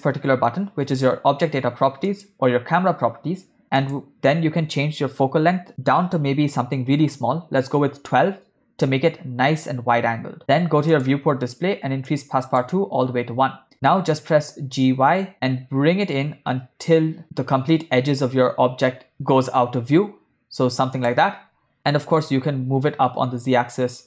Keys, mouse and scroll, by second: 2.2 click, 3.9-7.9 drag, 11.1 click, 11.5-12.0 scroll down 2, 12.2 click, 14.1 g, 14.7 middle click, 22.0 g.